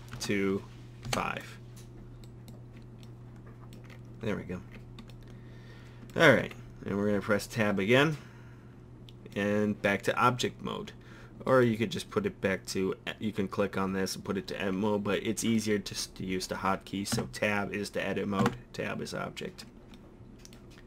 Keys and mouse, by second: 6.4 Tab, 7.6 middle click, 15.3-15.6 middle drag, 16.2 middle click, 17.2 Tab, 18.4 Tab.